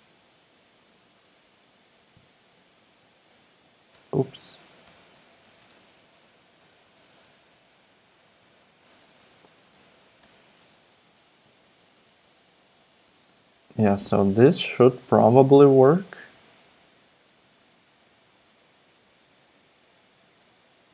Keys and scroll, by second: 3.1 Tab, 5.4 BackSpace, 5.6 BackSpace, 6.2 Return, 8.3 super+z, 8.4 BackSpace, 9.8 super+Left, 10.2 BackSpace.